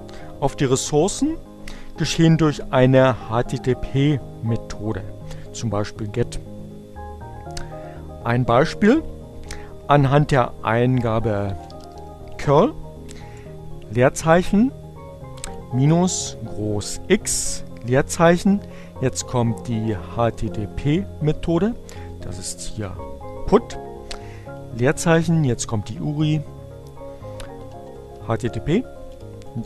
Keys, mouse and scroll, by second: 10.2-11.3 typing, 13.0 space, 13.3 -, 16.0 space, 20.6-23.4 typing, 25.6-26.5 typing, 28.2-29.2 typing.